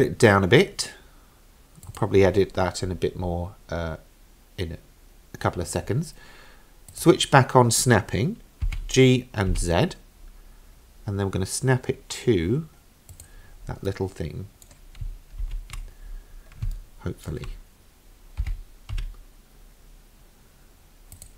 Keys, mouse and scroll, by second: 6.9 click, 8.7 g, 13.9-14.7 middle drag, 15.4 ctrl+z, 16.1-16.7 scroll up 4, 16.8-17.3 shift+middle drag, 18.4 g.